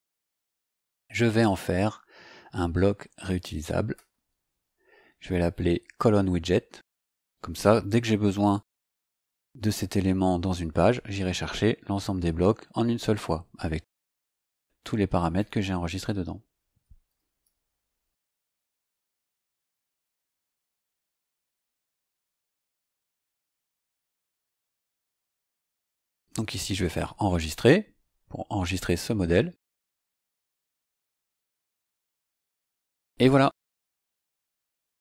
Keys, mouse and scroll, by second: 1.5 click, 4.0 click, 6.7 click, 7.7-9.6 typing, 10.3 KP_Subtract, 16.5-20.0 typing, 21.4 click, 25.3 click, 26.8 click, 28.7 click, 31.7 click, 33.2 click.